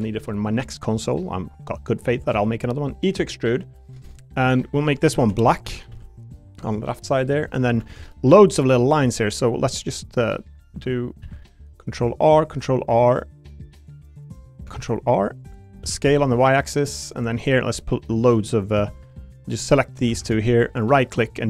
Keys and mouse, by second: 0.3 shift+middle click, 0.7 middle click, 1.9 click, 2.3 e, 3.8 click, 4.0 middle click, 5.2 l, 5.6 a, 5.9 g, 6.6 click, 7.1 middle click, 7.8 ctrl+r, 10.4 click, 11.2 ctrl+r, 14.7 ctrl+r, 15.8 s, 16.0 y, 17.1 click, 17.7 3, 18.7 2, 18.9 click, 19.5 shift+click, 20.2 ctrl+z, 20.4 shift+click, 20.7-21.4 right drag.